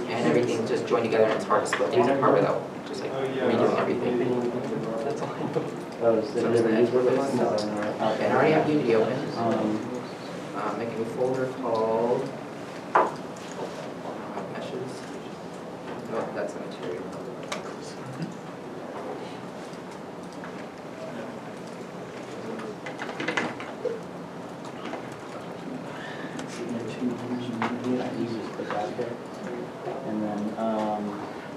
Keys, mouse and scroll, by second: 8.0 Return, 8.0 alt+Tab, 14.6 m, 14.8 s, 15.0 e, 15.0 s, 15.1 Return, 15.6 Return, 19.0 Return, 19.1 m, 19.2 s, 19.5 Return, 20.0 Return, 20.4 alt+Tab, 21.9 alt+click, 26.5 alt+click.